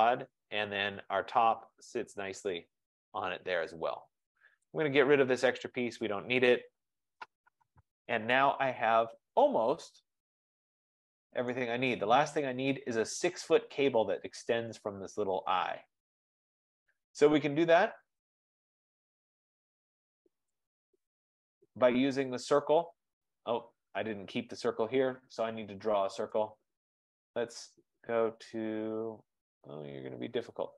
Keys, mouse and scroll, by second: 1.6-2.6 scroll, 2.6-3.6 scroll, 3.7-4.3 scroll, 5.7 click, 6.4-7.6 typing, 7.7 Delete, 8.5 scroll, 9.1 middle click, 10.8 scroll, 11.6 right click, 12.1-12.8 scroll, 18.6 right click, 19.2-19.7 scroll, 20.7 middle click, 20.7 click, 26.7 click, 27.7 F15.